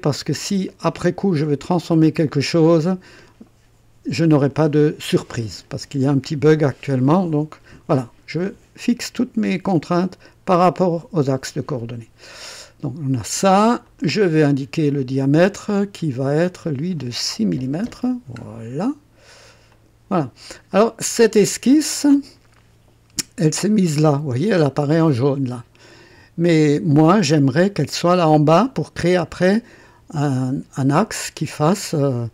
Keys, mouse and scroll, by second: 0.6-2.2 drag, 13.8 click, 16.4 click, 17.5 KP_6, 17.8 KP_Enter, 19.7 click, 20.7 click, 21.8 click, 24.6 scroll up 1.